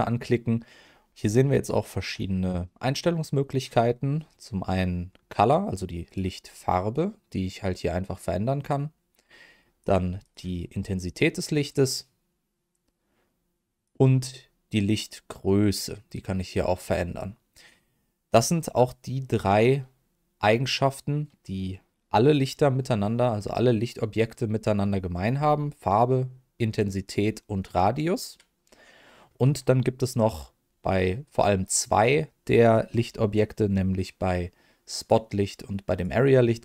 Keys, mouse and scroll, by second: 6.0 click, 10.2 click, 11.0-13.9 drag, 15.3-18.3 drag, 34.9 click, 35.9 click.